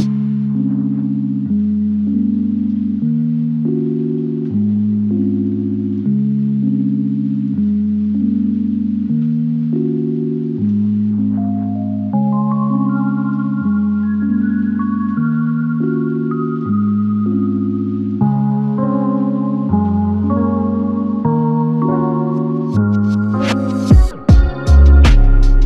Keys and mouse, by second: 0.7 alt+click, 1.8 alt+click, 3.9 ctrl+click, 5.6 alt+click, 6.6 ctrl+click, 7.9 alt+click, 12.3 alt+click, 13.2 alt+l, 13.4 ctrl+click, 15.5 ctrl+click, 20.4 alt+click, 23.9 alt+click.